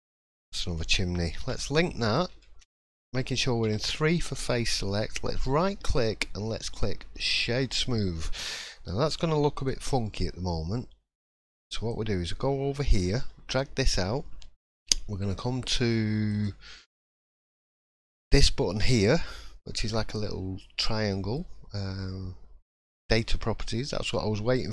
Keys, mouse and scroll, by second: 0.0 scroll down 1, 0.1 middle click, 1.4 l, 1.8 middle click, 2.4 shift+middle click, 2.7-3.1 scroll up 2, 3.6 3, 5.1 right click, 9.5 click, 11.2 click, 16.3 click.